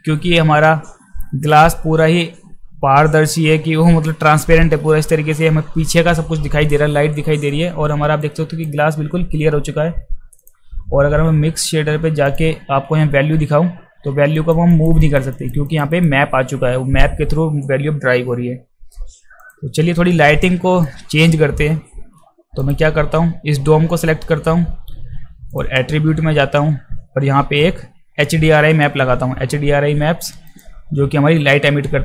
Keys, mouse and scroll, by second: 8.2 alt+click, 10.4 click, 12.3 click, 14.3 drag, 14.7 drag, 15.0 drag, 15.3 drag, 15.6 drag, 15.9 drag, 19.4 click, 20.4 alt+click, 22.6 click, 25.5 click, 30.5 click.